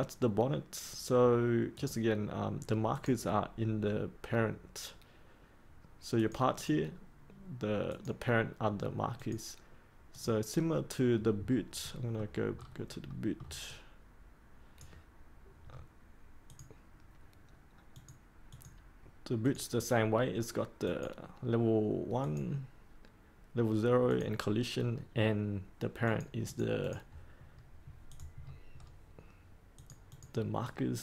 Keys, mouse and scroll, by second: 11.4 scroll down 1, 11.8 middle click, 12.5 scroll down 1, 13.0 middle click, 13.6-15.5 drag, 15.6-16.4 scroll up 1, 16.4 click, 27.4 scroll up 1, 28.0 click, 28.3-29.7 scroll up 1, 29.7 click.